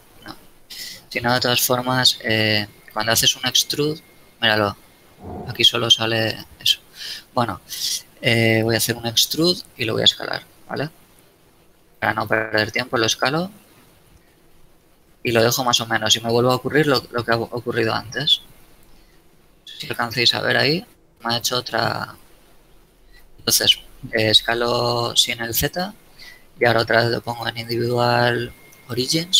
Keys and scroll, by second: 7.2 e, 9.8 shift+s, 10.2 shift+z, 13.5 s, 13.8 shift+z, 16.2 z, 22.5 shift+s, 22.9 shift+z.